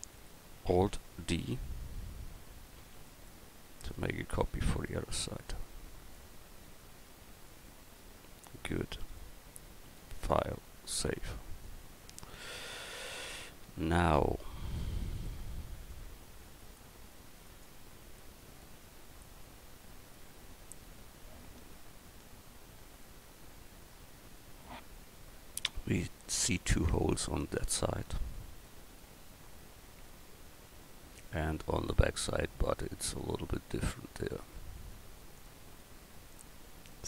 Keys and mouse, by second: 2.8 alt+d, 7.2 a, 12.8 KP_1, 15.9 middle drag, 17.6 right click.